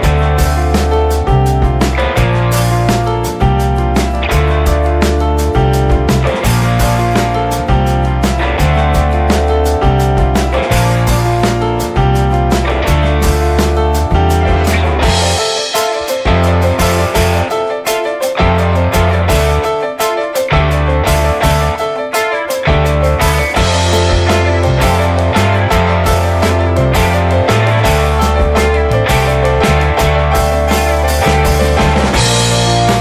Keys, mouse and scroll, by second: 6.4 click, 10.6 scroll down 10, 10.8-11.2 scroll up 10, 12.4-13.7 drag, 13.7 scroll up 4, 14.6-18.9 drag, 18.9 middle click, 19.2-19.7 scroll up 6, 19.7 middle click, 20.1-21.2 scroll down 2, 21.2 middle click, 21.6 click, 21.7 scroll down 1, 22.2 shift+middle click, 22.7 r, 24.3 alt+middle click, 24.8 scroll down 2, 25.0 alt+middle click, 25.3 scroll up 2, 26.0-29.8 shift+middle drag, 26.5 shift+a, 30.4-31.0 shift+middle drag, 31.0 g, 31.7 r, 32.2 s.